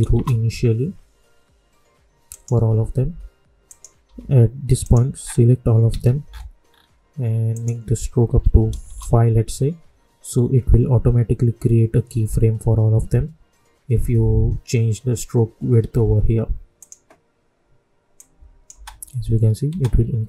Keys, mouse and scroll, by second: 0.1 Return, 2.2 click, 4.0 k, 4.8 click, 5.2 scroll down 1, 5.8 ctrl+a, 6.2 scroll up 1, 7.5 click, 8.8 Return, 16.7 click, 18.7 space.